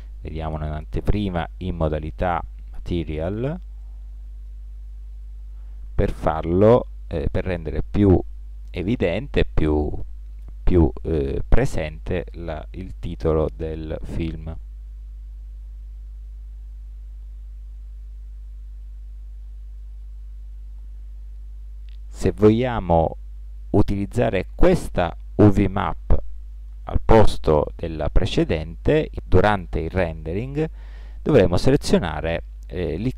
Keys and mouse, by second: 1.1-2.6 drag, 3.6-8.8 middle drag, 10.9-15.0 middle drag, 15.0 g, 17.0-19.9 middle drag.